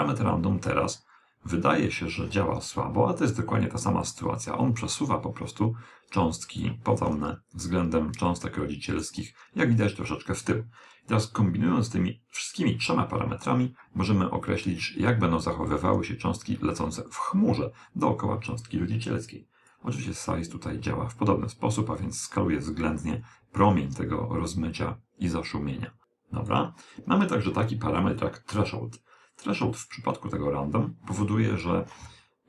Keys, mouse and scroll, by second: 4.6-5.8 scroll up 1, 5.8-7.5 middle drag, 17.1 click, 27.2 click.